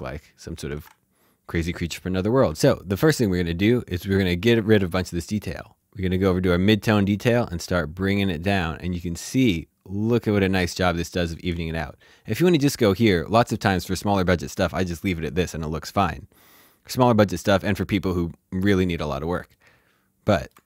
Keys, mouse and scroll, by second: 0.7 ctrl+z, 2.4 alt+z, 2.5 click, 5.0 click, 7.1 click, 19.3 click, 19.5 shift+middle click.